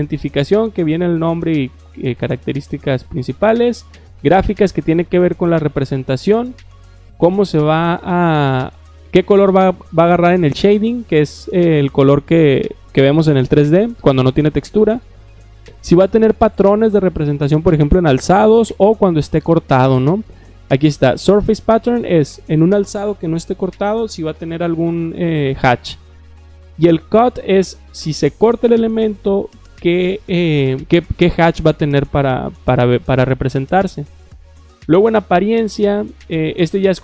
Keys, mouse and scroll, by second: 3.4 click, 34.4 click, 34.6 click.